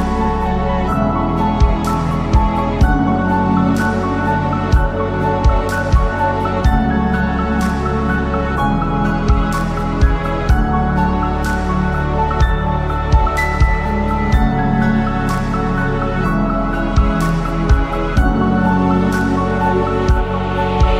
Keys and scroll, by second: 9.1 F3, 17.3 Delete, 18.0 F4, 18.4 Escape, 19.5 Delete.